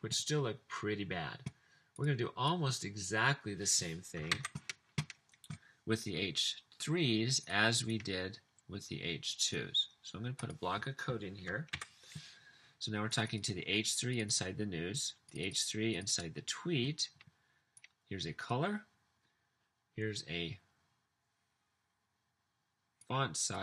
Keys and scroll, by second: 4.5 super+c, 11.8 super+v.